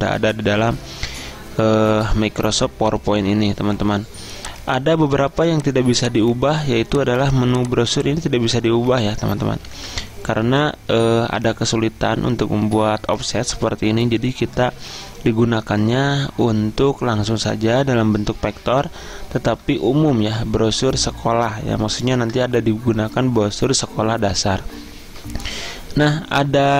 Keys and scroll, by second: 9.7 ctrl+z.